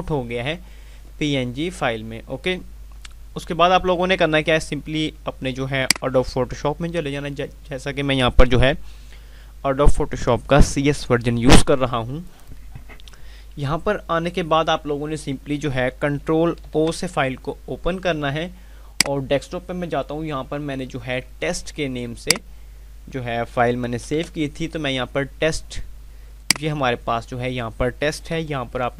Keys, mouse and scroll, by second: 5.8 click, 16.1 ctrl+Num_Lock, 18.8 click, 22.3 click, 23.7 typing, 26.3 click, 28.2 F5.